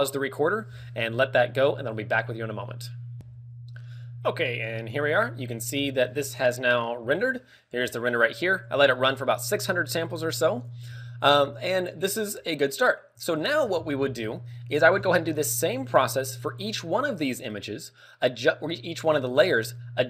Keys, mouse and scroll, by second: 3.2 Escape, 4.6 click, 5.0 middle click.